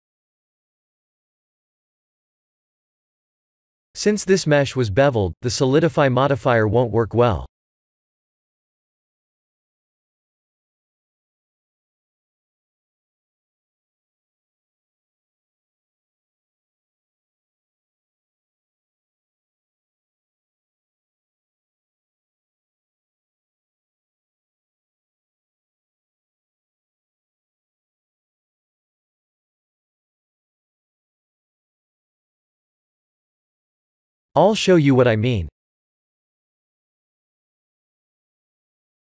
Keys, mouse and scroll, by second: 1.1 Tab, 1.5 3, 1.8 click, 2.3 x, 3.7 middle click, 4.4 Tab, 5.4 click, 8.7 scroll up 1, 9.2 shift+middle click, 9.2 scroll up 3, 9.7 middle click, 12.7 click, 16.1 ctrl+z, 16.6 ctrl+z, 18.2 Tab, 19.8 KP_1, 20.1 KP_7, 21.9 middle click, 22.9 Tab, 24.3 shift+h, 24.9 KP_1, 25.2 KP_7, 26.3 shift+middle click, 27.1 middle click, 28.0 middle click, 30.4 shift+d, 34.1 KP_1, 34.6 KP_3, 37.3 click, 38.8 click.